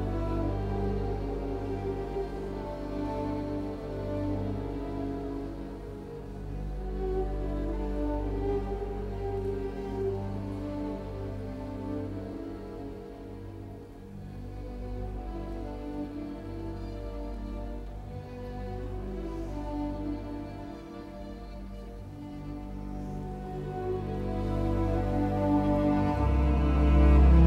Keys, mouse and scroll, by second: 5.3 KP_Decimal, 6.1 KP_4, 6.5 Return, 6.7 space, 8.2-9.2 typing, 10.2 KP_Decimal, 10.6 KP_4, 10.9 Return, 11.0 space, 27.4 t.